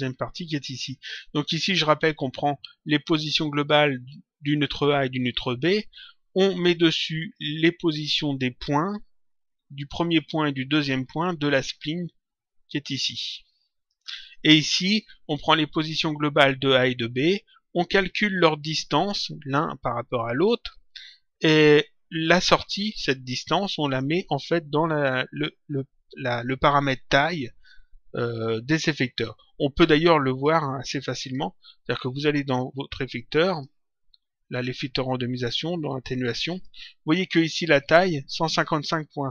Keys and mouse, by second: 13.2 click, 29.9 click, 30.9 click, 33.4 click, 36.4 click.